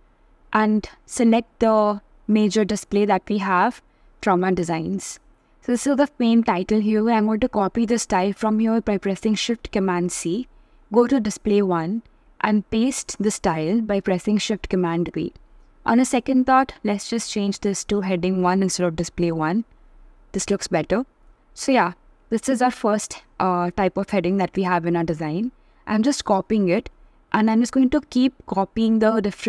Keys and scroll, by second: 7.7 alt+super+c, 11.8 alt+super+v, 16.6 shift+h.